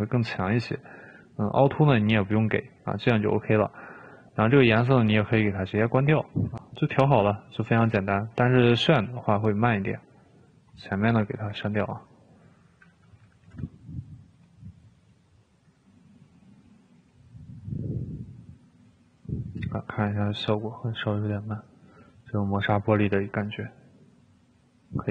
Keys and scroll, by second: 11.6 Delete, 11.9 Delete, 13.7 typing.